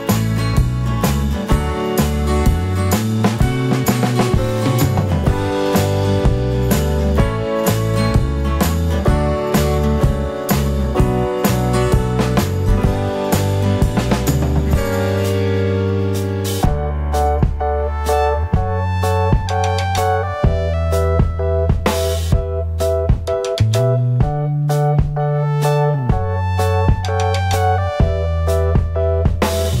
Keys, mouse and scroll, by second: 6.3-6.7 scroll up 1, 6.8 scroll down 1, 16.8-17.5 drag, 17.2 scroll down 1, 18.7 KP_Decimal, 24.0-29.8 drag, 26.8 scroll up 1, 27.0 scroll down 1.